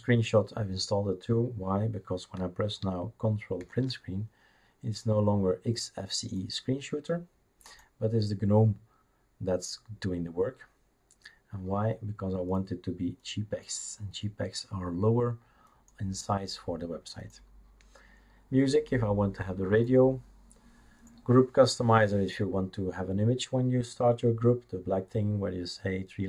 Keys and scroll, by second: 3.6 ctrl+Print.